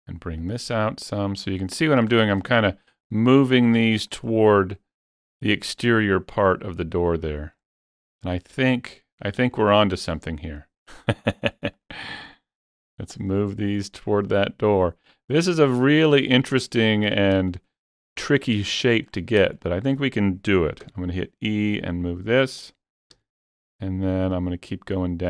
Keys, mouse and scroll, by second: 0.4-2.6 drag, 1.9 scroll up 1, 2.1 shift+middle click, 2.6 click, 6.5-8.6 drag, 8.6-10.5 drag, 10.5-12.3 drag, 12.3-14.4 drag, 14.4 click, 15.1-18.8 drag, 16.8 shift+middle click, 17.5 shift+middle click, 18.8 shift+middle click, 19.6 shift+middle click, 20.9 e, 22.6 click, 23.2 e.